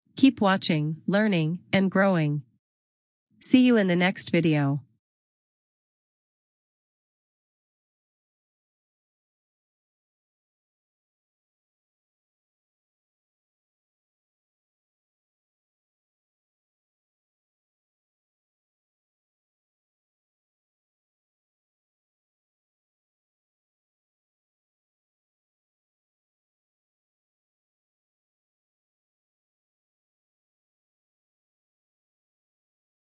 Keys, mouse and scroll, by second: 31.3 click.